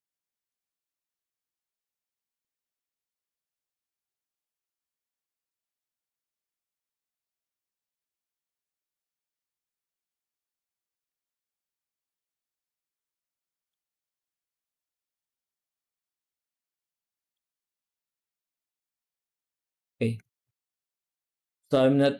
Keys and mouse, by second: 0.5 middle click, 1.3 click, 3.3 middle click, 4.2-10.3 shift+drag, 13.3 middle click, 14.5 middle drag, 15.6 middle drag, 16.9 middle drag, 18.1 z, 20.3 ctrl+s, 21.6-22.1 middle drag.